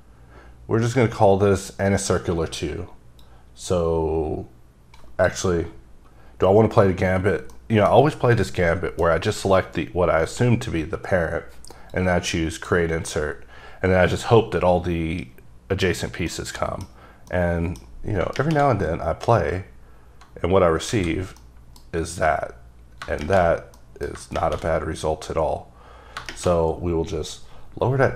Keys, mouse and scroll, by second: 3.7 click, 7.7 middle click, 8.5 middle click, 12.0 click, 15.0-15.9 scroll up 3, 15.9 scroll up 1, 16.4 middle click, 17.4 middle click, 19.4-20.1 scroll down 3, 21.0 alt+a, 21.5 middle click, 23.9 middle click.